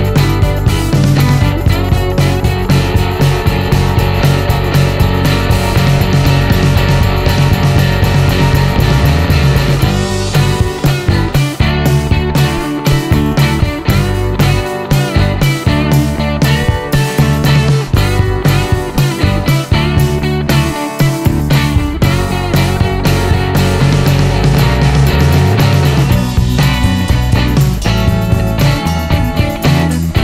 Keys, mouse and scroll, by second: 1.9 click, 4.0 click, 4.8-6.2 drag, 8.1 click, 11.1 click, 12.2 space, 15.6 click, 17.1 click, 18.1 middle click, 18.6-19.0 scroll up 1, 19.2-19.8 scroll up 2, 19.3 middle click, 19.9 middle click, 20.7 middle click, 22.0 click, 23.8 click, 24.3 click, 24.7 right click, 25.5 click, 26.7 shift+r, 28.1-29.0 typing, 29.8-30.1 scroll up 2.